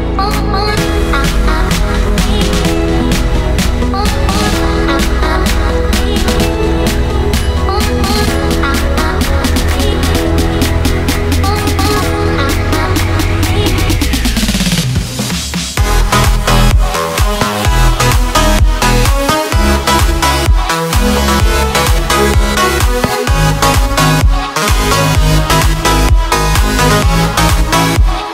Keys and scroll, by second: 0.8 ctrl+z, 4.5 ctrl+z, 5.4 ctrl+z, 6.7 ctrl+z, 12.1 ctrl+z, 15.1 ctrl+z, 16.9 ctrl+z, 18.4 ctrl+z, 18.9 ctrl+z, 21.1 ctrl+z.